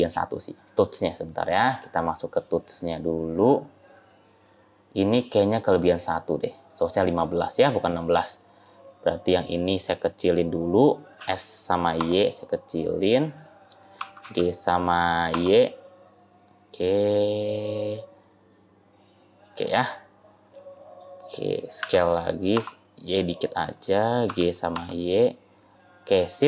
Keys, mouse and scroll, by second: 1.6-2.2 scroll down 8, 3.0 click, 7.0 click, 7.7 click, 11.0 s, 13.8 g, 19.6 middle click, 21.7 s, 24.1 g, 25.9-26.4 scroll up 1.